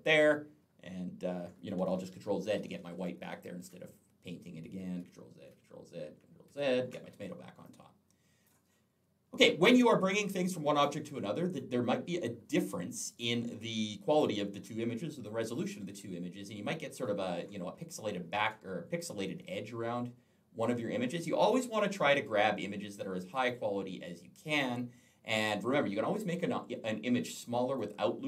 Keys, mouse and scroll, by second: 1.8 ctrl+z, 4.8 ctrl+z, 7.5 click, 9.5 click, 9.7 click, 10.6 click, 11.3 click, 12.9 click, 13.9 click, 16.1-16.5 alt+scroll up 1, 18.7-20.5 alt+scroll down 1, 27.6 click.